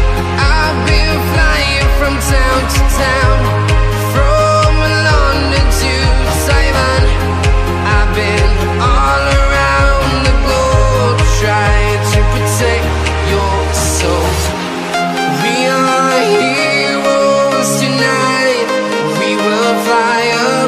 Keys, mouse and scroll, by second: 0.0-1.1 typing, 2.6 click, 3.2 typing, 3.9 click, 4.9 click, 6.9 Return, 7.3 click, 9.6 Delete, 11.3 click, 13.6 right click, 14.3 click, 14.8 alt+Tab, 18.4 click.